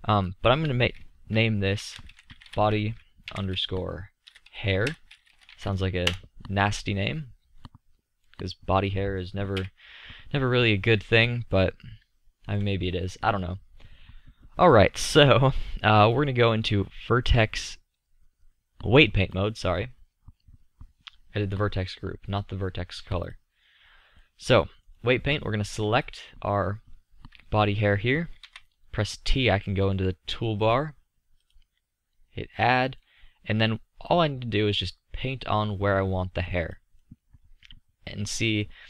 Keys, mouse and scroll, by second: 2.1-7.7 middle drag, 9.6 KP_5, 14.8-15.6 middle drag, 23.3-27.6 middle drag, 28.5 t.